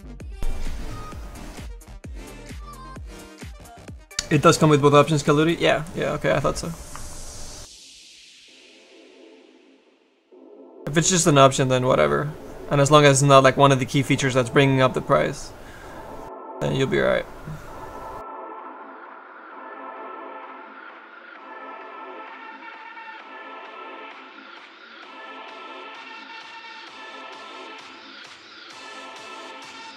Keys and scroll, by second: 9.8 s.